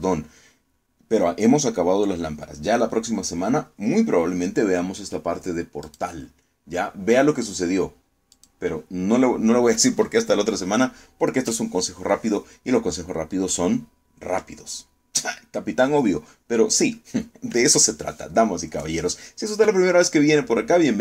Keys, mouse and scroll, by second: 6.5 click, 9.0 click.